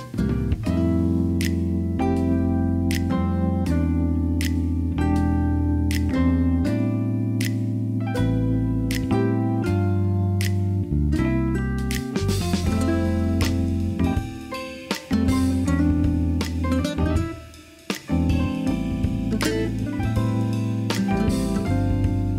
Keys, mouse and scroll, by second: 0.5 Tab, 1.6 KP_3, 2.8 shift+click, 3.7 click, 5.3 ctrl+s, 5.8-6.5 middle drag, 7.1-7.7 middle drag, 8.1 drag, 8.4 shift+middle click, 9.7 click, 10.7-11.6 drag, 11.6 Tab, 12.0 middle click, 12.4 shift+middle click, 13.5 KP_3, 13.8 alt+z, 15.6 click, 16.1 alt+z, 16.4 alt+click, 17.1 alt+z, 17.7 click, 19.7-21.6 drag, 22.1 Tab.